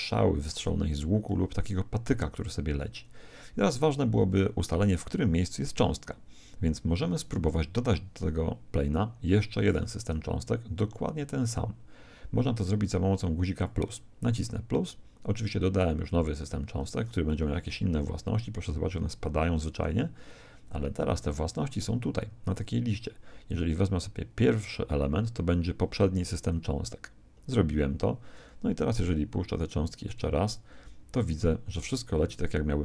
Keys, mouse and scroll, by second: 13.5 click, 17.4 alt+a, 19.7 Escape, 22.5 click, 29.6-31.8 drag, 30.6 alt+a.